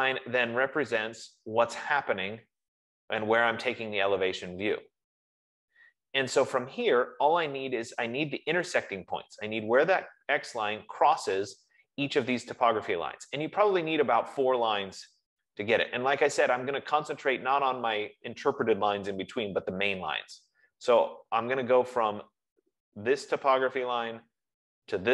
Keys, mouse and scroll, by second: 0.2 F15, 1.6 click, 2.4 middle click, 2.4 scroll.